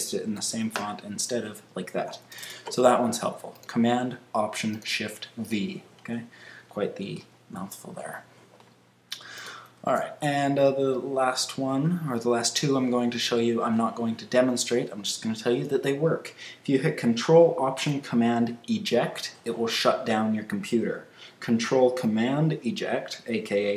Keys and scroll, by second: 0.3 super+a, 0.7 super+v, 2.3 super+a, 7.3 super+w, 9.8 super+q.